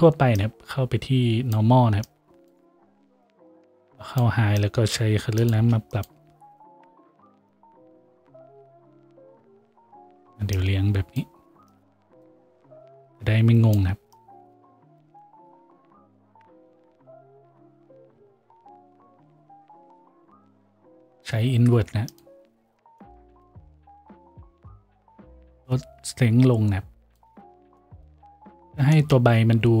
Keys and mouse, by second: 5.7 shift+d, 29.0-29.8 drag.